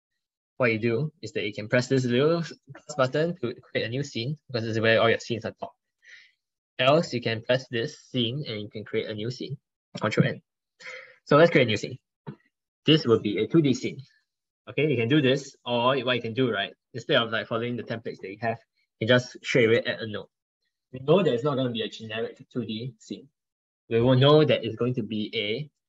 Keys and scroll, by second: 2.9 ctrl+1, 3.8 ctrl+1.